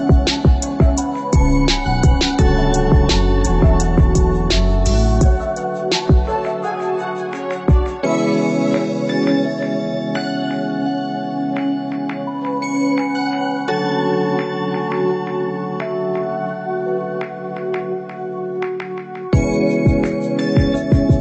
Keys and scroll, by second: 4.4 Down, 11.1 Down, 17.7 ctrl+c, 17.9 ctrl+v.